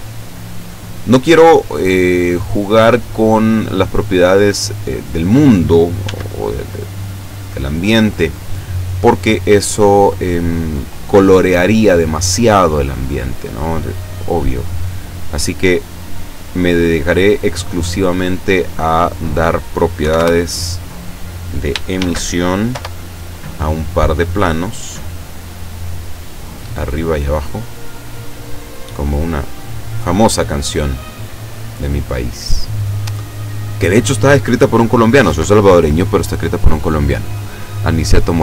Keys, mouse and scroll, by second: 1.0-3.2 drag, 6.0 s, 7.6 click, 9.3 click, 12.0 click, 15.1 click, 16.4 click, 19.0 click, 20.0 5, 20.2 Return, 22.0 shift+d, 22.7 Return, 23.7-26.5 drag, 26.8 right click, 27.3 right click, 28.5-30.2 drag, 30.6-31.0 scroll up 2, 31.3-31.6 scroll up 2.